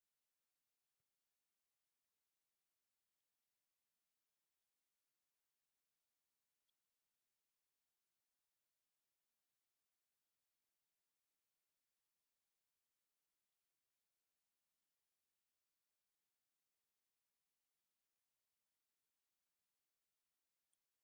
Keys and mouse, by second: 2.1 middle click, 3.0 middle click, 4.3 middle click, 6.5 middle click, 7.5 click, 10.4 middle drag, 11.7 middle drag, 12.3 middle drag, 13.2 middle click, 14.4 middle click, 16.1-20.6 drag.